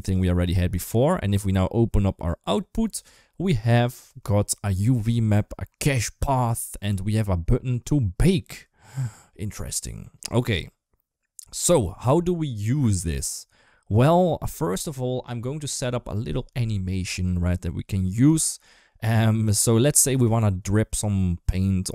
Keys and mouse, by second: 19.0 middle click, 19.4 shift+middle drag, 21.3 middle drag.